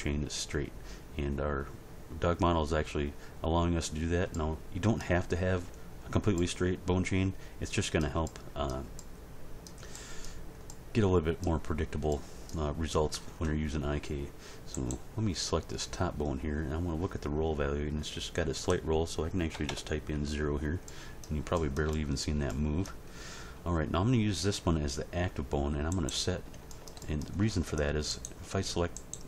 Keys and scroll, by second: 19.5 0, 19.6 Return.